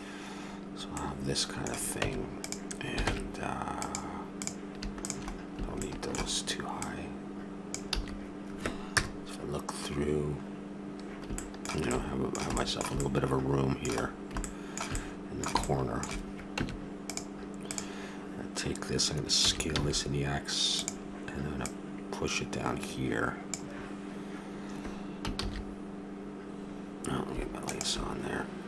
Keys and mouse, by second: 1.9 Tab, 3.0 ctrl+Tab, 5.4-7.9 drag, 7.9 a, 8.4 click, 8.9 KP_0, 16.6 Tab, 19.4 s, 23.3 click, 26.2 shift+z.